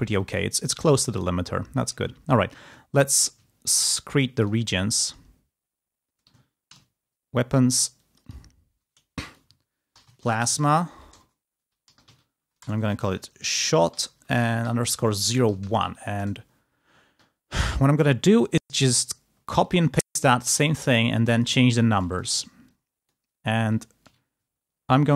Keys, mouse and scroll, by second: 0.3 space, 1.2 click, 2.8 ctrl+scroll up 2, 3.7 ctrl+middle click, 3.8 ctrl+click, 4.9 click, 6.6 ctrl+v, 7.8 click, 9.5-15.0 typing, 15.1 ctrl+a, 15.5 ctrl+c, 15.8 ctrl+End, 16.0 ctrl+Return, 18.4 click, 19.4 ctrl+click, 20.8 ctrl+click, 21.5-21.8 ctrl+scroll down 2, 22.0 ctrl+click, 22.6 ctrl+click, 23.3 ctrl+scroll down 2, 23.6 ctrl+scroll up 2.